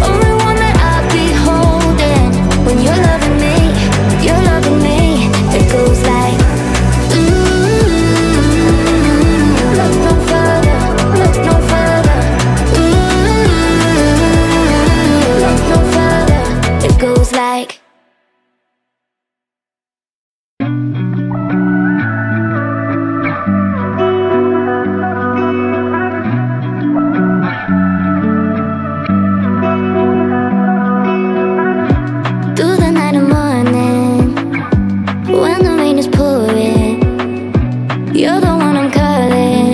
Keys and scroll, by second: 4.6 space, 35.3 Delete.